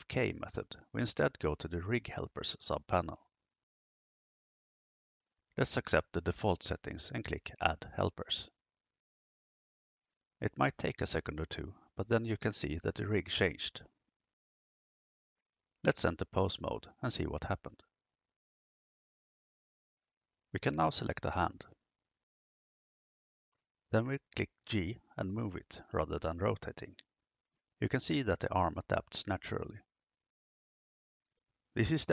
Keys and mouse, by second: 4.3 click, 10.2 click, 16.3-19.3 drag, 23.2 right click, 24.6 g.